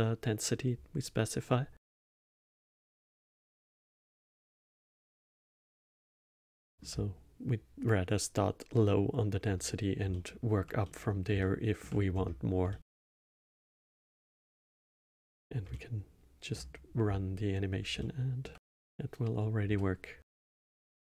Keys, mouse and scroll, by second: 2.0 click, 3.0 click, 4.0 middle click, 4.8 middle click, 5.5 click, 6.2-9.4 alt+middle drag, 9.4 scroll up 2, 10.1-12.1 alt+middle drag, 12.1-12.7 scroll down 1, 12.7-15.1 alt+middle drag, 15.1 space, 15.7-19.7 alt+middle drag, 19.7 space.